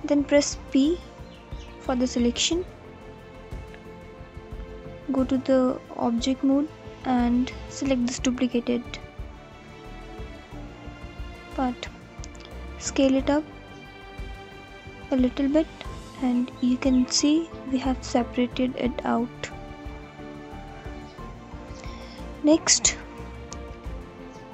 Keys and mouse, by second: 1.0 p, 4.6 Tab, 6.3 click, 7.0 click, 7.5 click, 7.9 middle click, 8.3 click, 8.4-10.2 middle drag, 10.2 s, 13.1 click, 15.4-15.8 alt+drag, 17.7-18.7 alt+drag, 20.4 click.